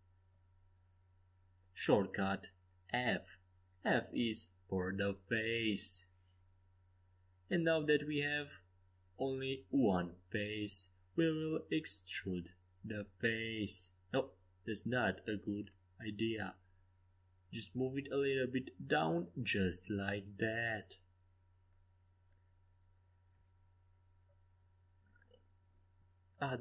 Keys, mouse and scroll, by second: 3.5 KP_5, 3.9 KP_1, 4.2 KP_3, 4.8 KP_5, 12.9-16.2 drag, 16.6 ctrl+z, 17.6-19.6 drag, 22.1-25.6 middle drag, 23.8 a, 25.6 ctrl+r.